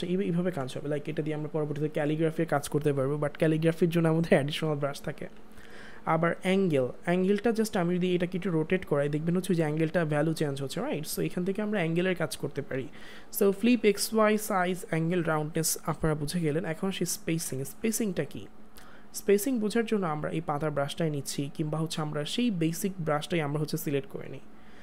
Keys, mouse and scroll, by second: 0.4 click, 0.5 ctrl+z, 6.4 click, 12.5 click, 12.7 z, 17.4 z, 19.0 click.